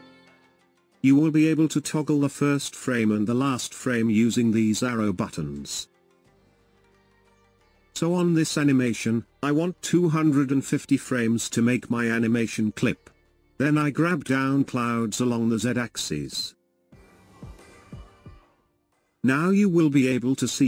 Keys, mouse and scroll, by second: 6.0-9.0 drag, 10.9 click, 15.8 click, 15.8 right click, 16.6-19.9 drag, 16.6-19.9 right drag, 20.1 click, 20.1 right click, 20.3 click, 20.3 right click, 20.5 click, 20.5 right click.